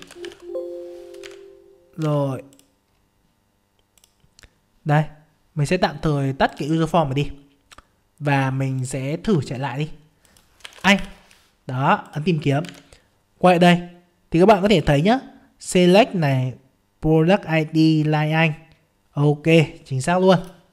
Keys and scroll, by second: 1.2 alt+Tab, 9.2 F5, 12.6 alt+Tab.